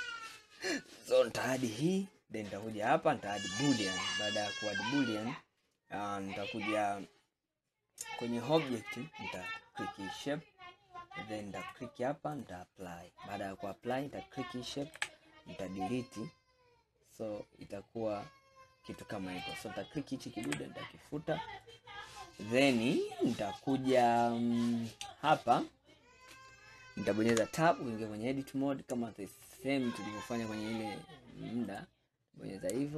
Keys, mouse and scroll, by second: 0.8-1.5 middle drag, 1.5 click, 3.7-5.8 drag, 8.6 click, 11.7-13.9 drag, 15.1 Delete, 16.0-19.1 middle drag, 19.5 click, 20.5 Delete, 21.2-21.7 scroll down 1, 21.7-24.9 middle drag, 24.9 click, 27.4 Tab, 28.2-30.0 scroll up 2, 31.7 alt+click.